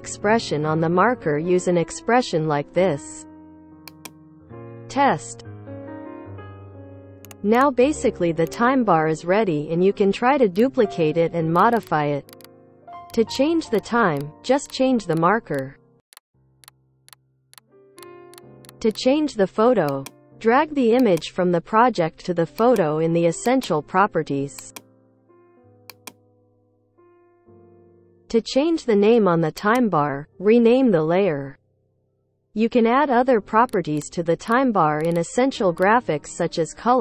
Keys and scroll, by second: 0.0-3.1 typing, 4.8 space, 8.8 ctrl+d, 9.0 ctrl+d, 30.7 Return, 30.8-32.2 typing, 32.2 Return, 36.2 shift+l, 36.4 Return.